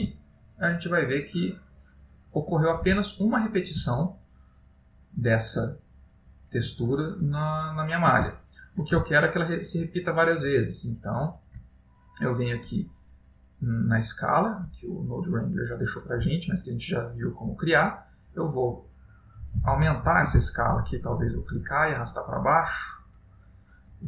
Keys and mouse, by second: 0.4 ctrl+middle click, 1.9 middle click, 3.1 shift+middle click, 7.5 ctrl+middle click, 8.5 shift+middle click, 9.3 middle click, 10.5 middle click, 10.7 shift+middle click, 11.5 ctrl+middle click, 12.2 middle click, 13.2 ctrl+middle click, 14.3 middle click, 14.9 ctrl+middle click, 18.1 click, 21.4 click.